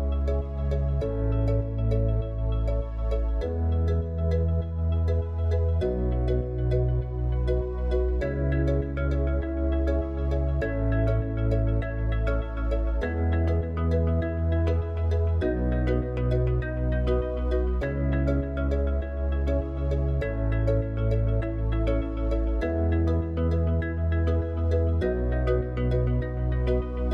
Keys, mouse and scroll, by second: 3.0 shift+d, 6.6 r, 11.5 r, 14.0 g, 18.2 click, 19.7 g, 25.8 click, 26.8 click.